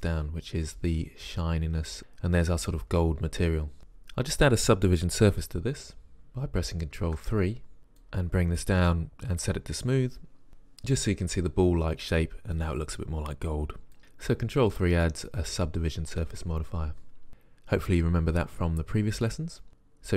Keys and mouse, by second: 7.1 ctrl+3, 8.3 click, 15.1-15.9 drag, 16.5-16.9 drag.